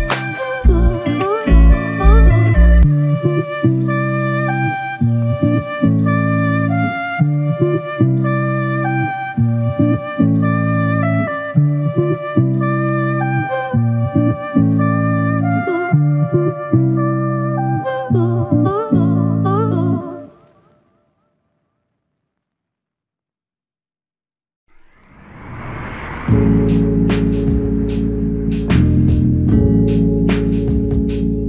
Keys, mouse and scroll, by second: 0.2 alt+click, 1.3 alt+click, 3.8 double click, 7.8 alt+click, 11.1 double click, 11.6 alt+click, 12.5 alt+click, 15.4 alt+click, 15.8 alt+click, 18.3 double click, 21.3 alt+click, 26.4 alt+click, 29.9 alt+click, 30.5 alt+click.